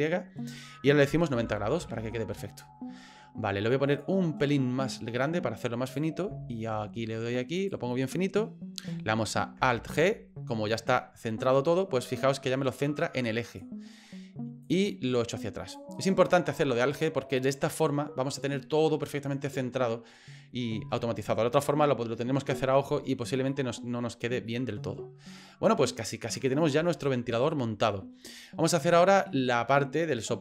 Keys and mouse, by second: 5.2 click, 6.2 s, 8.0 middle click, 9.8 alt+g, 10.9-12.0 middle drag, 13.5 click, 14.6-15.8 drag, 15.9 right click, 16.3-17.7 middle drag, 23.5 middle click, 24.4 middle click, 25.4 middle click, 26.2 middle click, 26.8 shift+middle click, 27.8 middle click, 28.9 middle click.